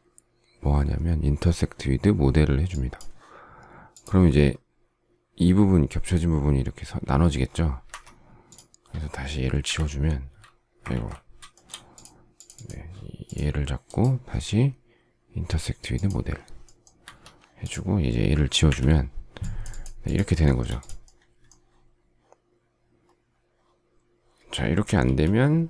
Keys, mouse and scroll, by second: 7.8 Escape, 9.5 Delete, 10.8 ctrl+z, 11.4 shift+middle click, 16.9 Escape, 18.6 Delete, 20.3 shift+middle click, 24.9 alt+t.